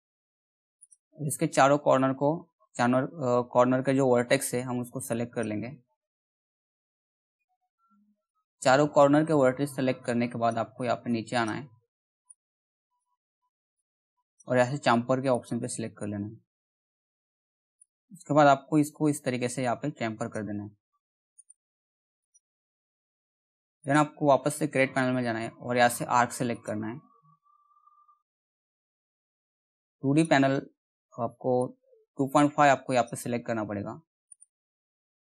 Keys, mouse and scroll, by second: 5.7-14.9 ctrl+drag, 16.0 middle click, 17.4-21.0 drag, 21.0 right click, 21.8 click, 26.1 click, 27.2-29.1 scroll up 1, 29.8-33.9 drag, 33.9 right click.